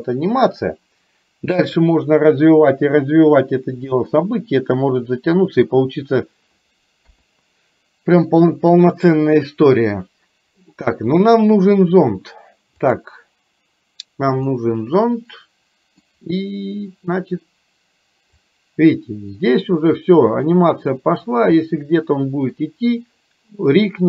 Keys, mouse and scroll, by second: 0.6-6.4 drag, 7.1 KP_3, 8.3 middle click, 11.4 middle click, 12.9 click, 14.5-16.1 middle drag, 18.5-21.1 drag, 21.6-22.6 middle drag.